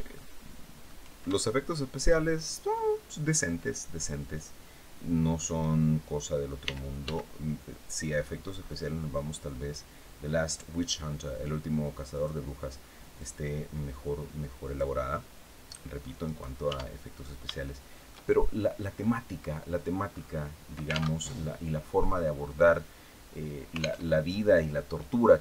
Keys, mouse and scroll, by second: 1.0 shift+middle click, 2.1 shift+scroll down 3, 6.3 r, 6.7 x, 7.7-8.2 scroll up 2, 9.0 scroll down 2, 11.8 click, 12.9-14.6 drag, 15.3 click, 16.4 Tab, 16.7-17.1 scroll down 1, 17.3-18.9 shift+middle drag, 19.1-19.4 scroll down 1, 19.8-20.1 scroll up 2, 20.9 alt+Tab, 23.7 alt+Tab, 24.7 scroll down 2, 25.1-25.4 middle drag.